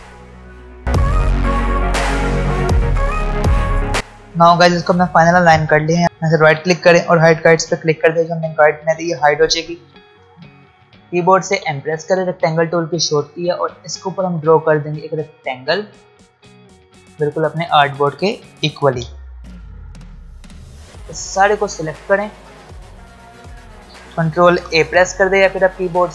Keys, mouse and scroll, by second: 0.8 click, 0.8 shift+Right, 0.9 shift+click, 0.9-1.7 scroll down 3, 1.0 click, 1.5 shift+Right, 1.6 Down, 1.7 click, 1.7 click, 1.9 shift+click, 2.1 shift+Left, 2.2 Right, 2.2 shift+click, 2.3-2.9 scroll down 3, 2.4 click, 2.4 ctrl+z, 2.6 click, 2.7 shift+click, 2.8 space, 3.1 space, 3.2 alt+Num_Lock, 3.2 alt+scroll up 1, 3.3 click, 3.4 shift+Up, 3.4 alt+scroll down 1, 3.5 Down, 3.5 alt+scroll up 1, 3.6 shift+Up, 3.7 alt+scroll down 1, 3.8 alt+scroll up 1, 3.9 space, 6.0 ctrl+Num_Lock, 6.0 ctrl+alt+scroll down 1, 6.1 right click, 7.3 click, 9.8 space, 11.4 m, 13.6-18.7 drag, 18.7 v, 19.2 space, 19.6 scroll up 1, 19.8 space, 20.6 click, 22.8 space, 22.8 scroll down 1, 25.8 space, 26.0 click.